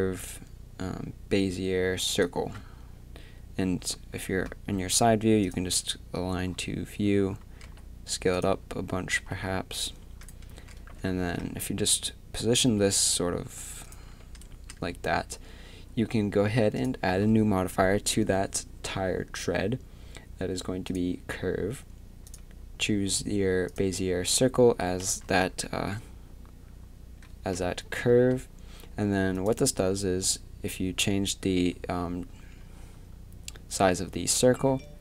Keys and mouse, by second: 5.5-8.3 drag, 7.6 s, 10.5 Tab, 10.5 s, 11.0 a, 11.4 g, 14.5 Tab, 16.8-20.9 drag, 22.3-25.2 drag, 25.2 z, 25.7 middle click, 27.5 KP_3, 28.1 z, 29.8 s.